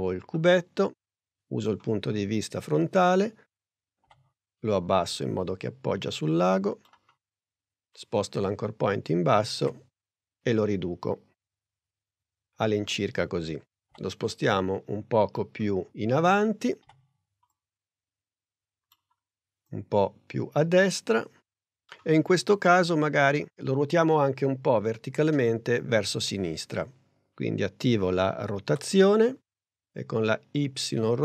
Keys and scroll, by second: 4.1 p, 9.7 s, 16.8 p, 28.7 r.